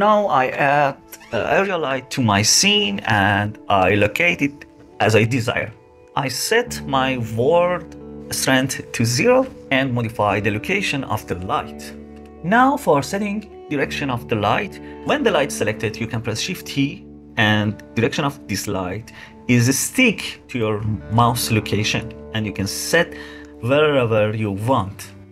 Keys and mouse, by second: 0.7 shift+a, 8.4 click, 11.0 click, 15.4 shift+t, 20.4 click, 20.8-23.7 drag.